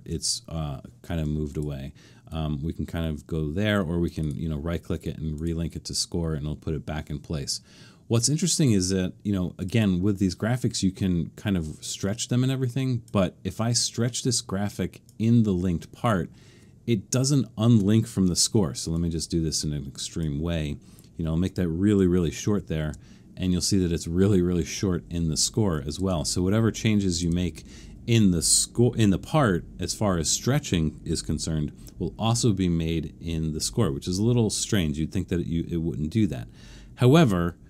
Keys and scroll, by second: 22.4 alt+super+/, 26.0 super+z, 26.7 super+z.